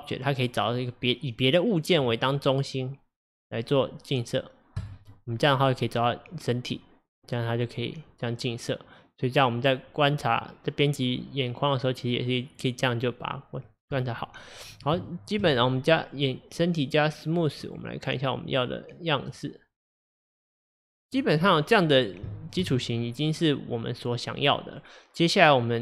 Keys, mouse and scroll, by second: 0.4 click, 7.6-10.6 middle drag, 13.4-14.0 middle drag, 14.0 click, 15.1-15.5 shift+middle drag, 15.5 click, 17.7-19.4 drag, 19.8-21.1 middle drag, 21.1-21.5 drag, 21.5-25.8 middle drag.